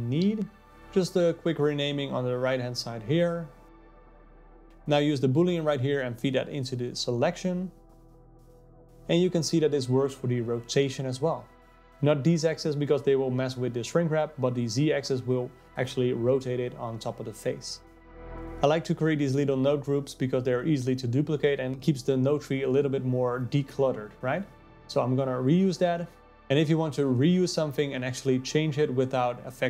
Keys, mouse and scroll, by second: 4.3-7.6 drag, 9.0-10.0 drag, 10.5 click, 11.5-13.0 drag, 14.3-16.5 drag, 17.9-20.9 drag, 21.7-24.9 drag, 25.7-27.1 drag, 27.2 shift+d.